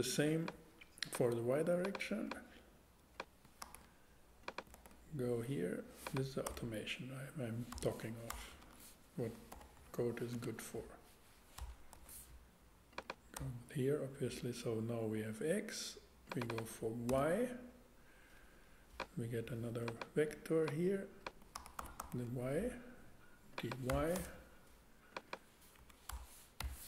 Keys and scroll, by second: 3.6 super+c, 6.4 Tab, 7.7 BackSpace, 9.5 f, 9.7 Left, 10.3 space, 11.6 BackSpace, 11.9 Tab, 13.3 Tab, 17.1 y, 21.5 super+c, 21.8 super+v, 23.9 BackSpace, 24.1 y, 25.8 Left, 26.1 BackSpace, 26.6 0.